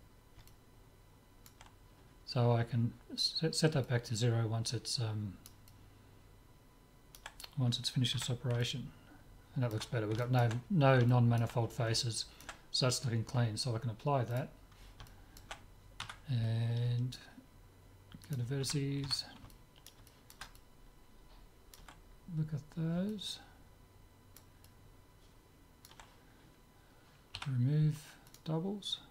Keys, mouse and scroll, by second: 3.9-7.7 middle drag, 8.2 z, 8.8-14.0 middle drag, 14.4-16.2 drag, 15.1-16.1 right drag, 16.1 Tab, 16.2 middle click, 18.3-20.3 drag, 18.6 a, 19.2 a, 20.1-26.5 middle drag, 27.4 w.